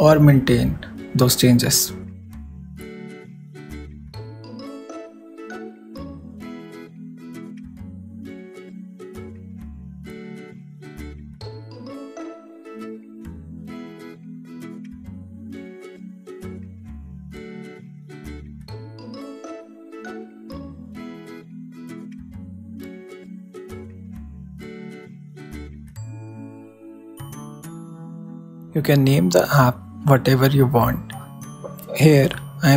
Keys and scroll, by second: 3.6 shift+Left, 3.6-6.1 typing, 7.2 super+e, 8.4 shift+super+s, 19.3-20.4 typing, 30.4-32.7 typing.